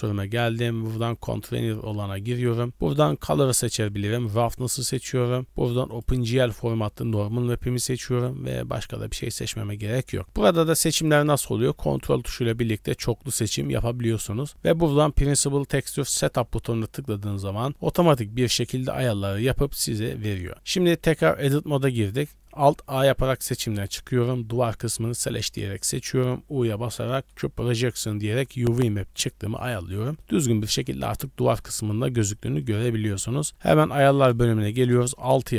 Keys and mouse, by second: 21.1 Tab, 23.0 alt+a, 25.2-26.2 drag, 26.7 u, 28.2 shift+middle click, 29.4 Tab, 30.2 click, 31.6 middle drag, 32.6 middle drag, 33.4 middle click, 33.9 click.